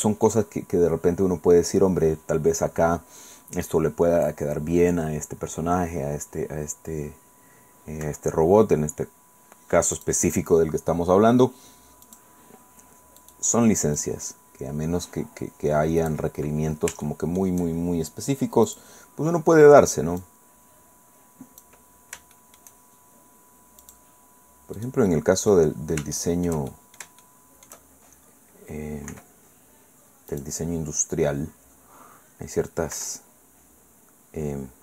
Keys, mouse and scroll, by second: 0.2 click, 8.0 i, 9.9 click, 12.0 click, 13.2 click, 14.0-16.3 drag, 17.0 shift+middle click, 18.7 click, 20.2-21.8 drag, 21.8-22.3 scroll down 1, 22.3 shift+middle click, 23.8 click, 25.1 middle click, 26.1-27.2 shift+middle drag, 27.8 shift+click, 27.8-29.7 shift+middle drag, 29.1 i, 30.3 click, 31.6-32.9 middle drag, 32.9 i.